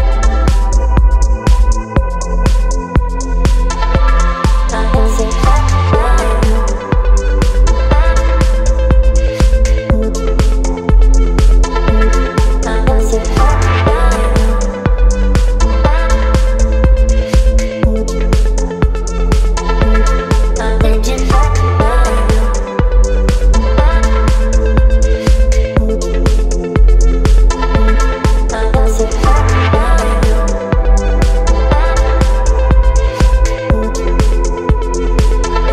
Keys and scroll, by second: 0.5 Return, 1.3 space, 4.9 ctrl+t, 8.5 space, 9.8 space, 11.2 Up, 17.6 space, 19.1 Delete, 21.8 space, 22.2 p, 31.9 Return, 32.1 Delete, 32.6 ctrl+d, 33.5 space, 33.9 v.